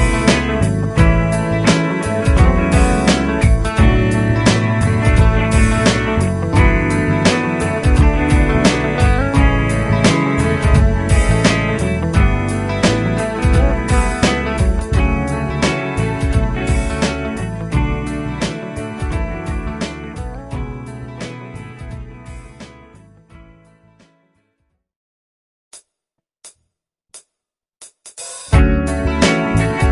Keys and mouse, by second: 8.3 F2, 13.0 ctrl+q, 13.9 F2, 16.6 ctrl+click, 20.2 F3, 22.2 F2, 25.7 ctrl+click, 28.5 F3.